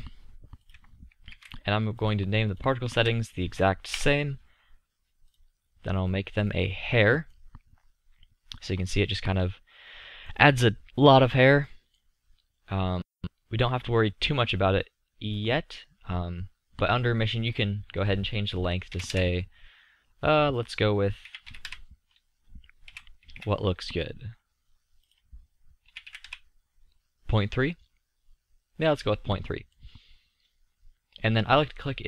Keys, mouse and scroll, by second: 9.2 middle click, 13.6-15.3 middle drag, 17.0-17.5 middle drag, 19.4-20.6 middle drag, 22.4 middle click, 23.0 KP_1, 23.4 KP_5, 29.4-32.0 middle drag.